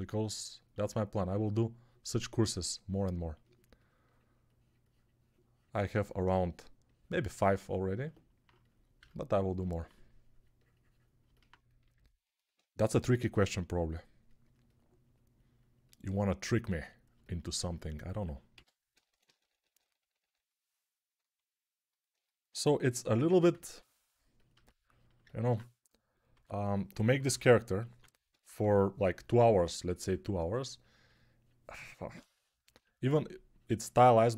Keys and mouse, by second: 12.8 g, 18.4-20.0 typing, 26.2-28.5 typing.